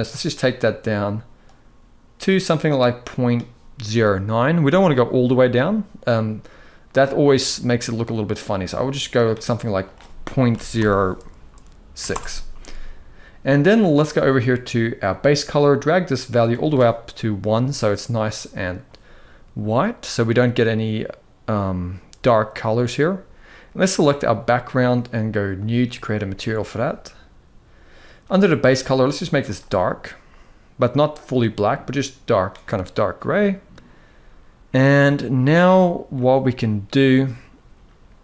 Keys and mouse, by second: 6.7-8.9 drag, 9.6-11.8 drag, 14.8 click, 23.7 click, 35.7 middle drag.